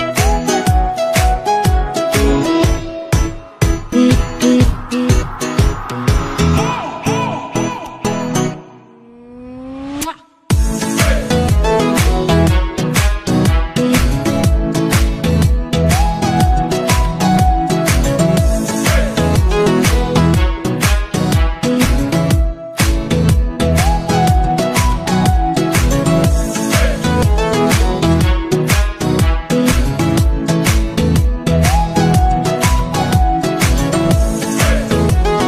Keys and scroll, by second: 2.4 ctrl+z, 17.5 ctrl+z, 25.2 ctrl+z, 32.2 ctrl+z.